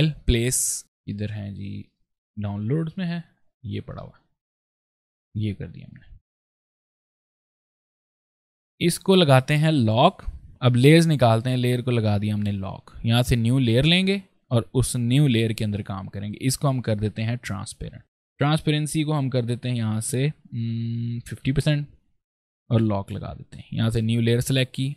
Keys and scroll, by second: 7.1 ctrl+space, 13.6 space, 21.0 KP_5, 21.2 KP_0, 21.4 Return, 24.8 ctrl+space.